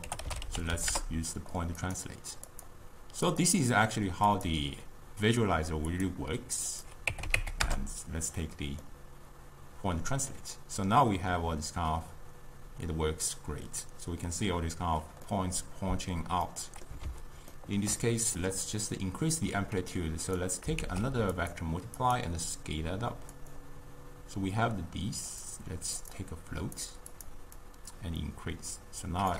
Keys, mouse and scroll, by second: 2.6 click, 4.3-8.9 drag, 8.9-12.0 middle drag, 15.3-20.0 middle drag, 20.0 click, 20.8 shift+d, 22.0-25.1 drag, 25.4-27.3 drag, 27.6-29.3 drag.